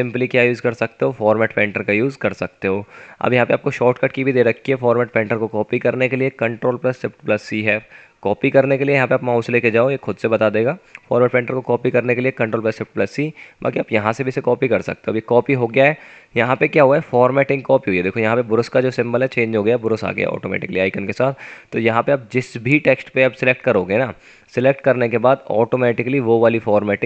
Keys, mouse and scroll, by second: 21.7 F9.